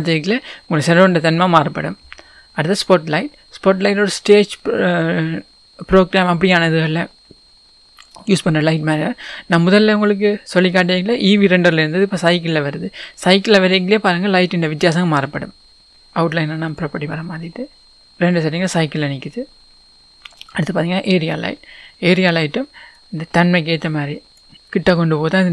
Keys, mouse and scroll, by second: 2.7 click, 8.3 scroll up 1, 9.3 scroll down 1, 16.0-20.8 drag, 21.8-23.0 scroll down 1, 23.0 click, 24.5 scroll up 1.